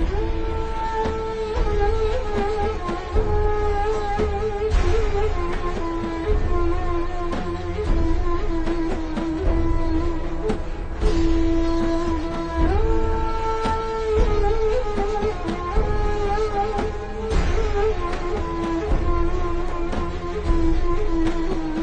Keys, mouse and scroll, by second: 0.0 click, 1.5-2.3 alt+shift+scroll down 2, 2.4 alt+shift+scroll up 1, 3.2 scroll up 1, 3.3 a, 3.4 click, 5.6 click, 6.6 click, 6.9-8.2 alt+scroll down 2, 8.5 alt+shift+scroll up 1, 9.7-10.1 alt+shift+scroll down 2, 10.1 v, 10.2 click, 11.3 click, 12.2 alt+shift+scroll up 1, 12.8-13.2 alt+shift+scroll up 2, 14.4 click, 14.7 a, 15.5 click, 16.9 click, 18.9-19.5 alt+shift+scroll down 2, 19.7 alt+shift+scroll up 2, 20.0 z, 20.2 click, 20.4 v, 20.6 scroll up 1, 21.2 click.